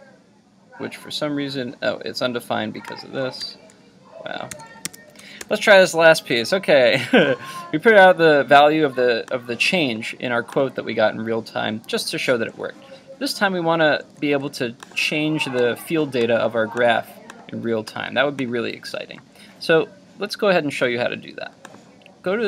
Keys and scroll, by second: 3.4 super+z, 4.5 super+s, 4.9 super+Tab, 5.4 super+r.